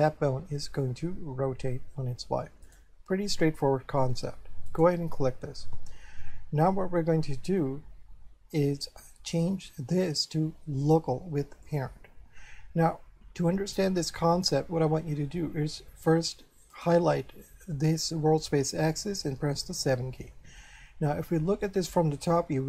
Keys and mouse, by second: 2.7 right click, 4.7 right click, 9.3 click, 11.7 click, 16.7 right click, 19.4 7, 21.7 shift+middle click.